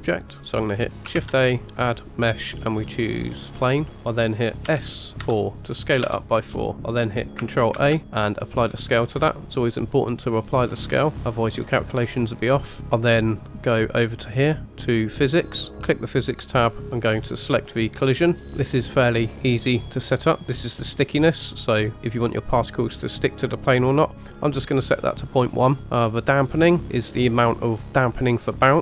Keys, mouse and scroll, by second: 0.6 scroll down 2, 1.1 shift+a, 4.6 s, 6.5 scroll down 3, 7.8 ctrl+a, 12.8-14.9 scroll down 2, 15.7 click, 18.0 click, 20.4 click, 24.4 click.